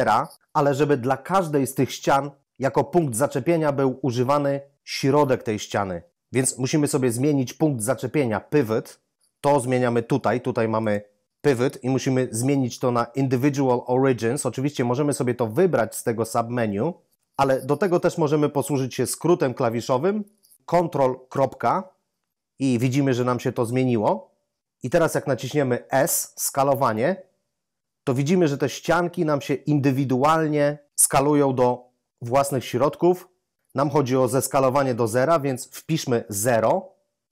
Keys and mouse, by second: 10.8 click, 21.3 ctrl+., 25.9 s, 36.4 0.